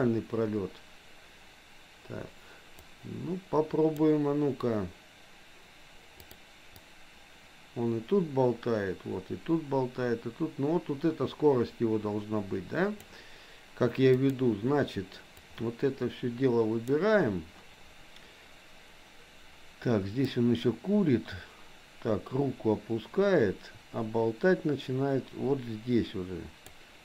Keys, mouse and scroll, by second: 2.7-4.0 drag, 6.4 click, 6.9-13.2 drag, 14.2 click, 15.4-17.0 drag, 20.4-26.7 drag.